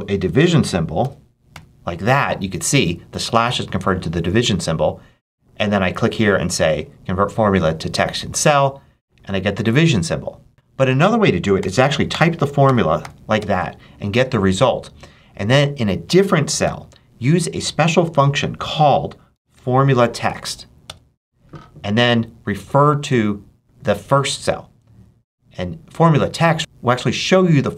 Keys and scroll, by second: 0.3 6, 0.9 /, 1.4 7, 11.4 =, 12.0 6, 12.5 shift+8, 12.9 shift+7, 13.2 Return, 16.5 =, 19.0-19.9 typing, 20.3 shift+Right, 20.7 Return.